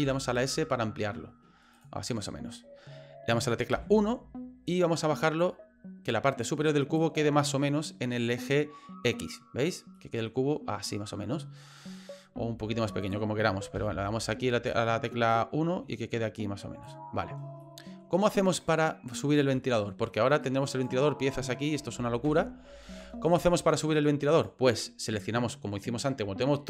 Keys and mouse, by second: 0.0 s, 3.7 KP_1, 5.5-7.0 drag, 10.0-11.8 middle drag, 12.3 s, 13.7 KP_1, 15.3-16.8 drag, 17.6 middle click, 18.7 middle click, 19.7 shift+middle click, 20.4 right click, 21.3 right click, 22.0 ctrl+z, 22.3 ctrl+z, 22.8 ctrl+z, 23.5 middle click, 24.3 right click.